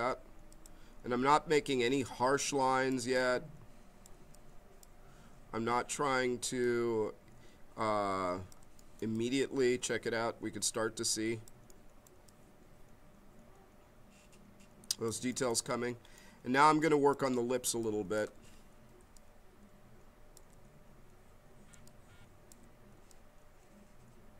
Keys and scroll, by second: 18.9 b, 21.7 b.